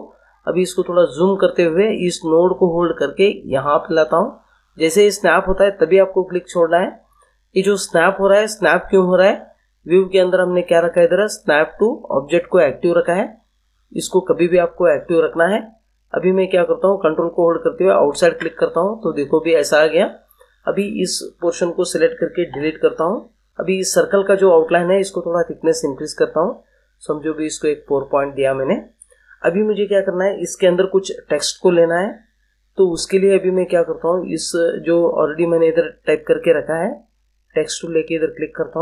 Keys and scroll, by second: 22.5 Delete.